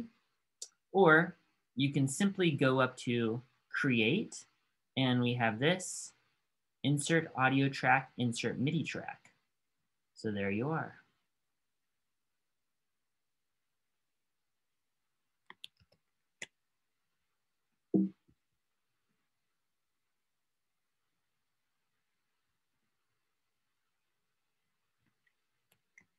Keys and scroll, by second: 15.9 shift+super+r.